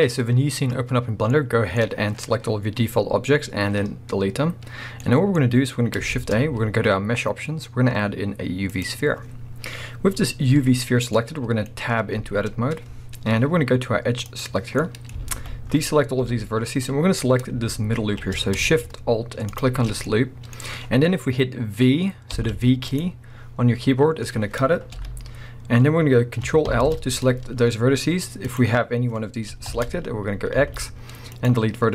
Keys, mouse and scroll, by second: 1.3 middle click, 6.1 shift+a, 10.6-14.3 middle drag, 10.6-11.1 scroll up 2, 12.2 Tab, 14.3 click, 14.8-19.5 middle drag, 15.3 alt+a, 16.3 KP_1, 17.1 scroll up 1, 19.5 alt+shift+click, 20.0 scroll up 1, 20.1-23.0 middle drag, 22.3 v, 23.0 right click, 24.3-24.9 scroll down 1, 24.9 KP_1, 26.7 ctrl+l, 28.5 click, 29.7 ctrl+l, 30.6 x.